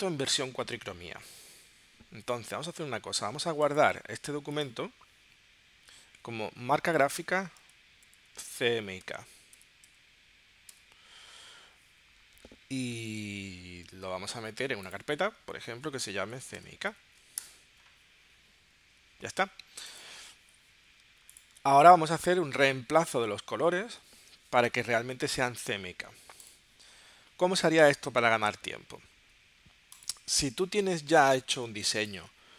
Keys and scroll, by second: 8.0-10.7 typing, 16.0-17.4 typing, 31.7 alt+space.